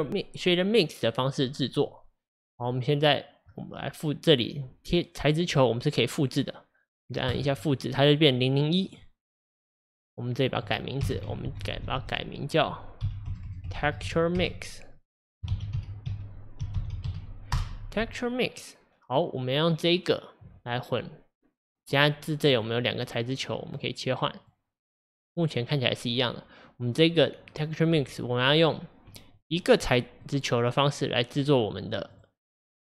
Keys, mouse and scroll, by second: 7.4-17.5 drag, 19.8 click, 23.7 click, 30.3-32.9 drag.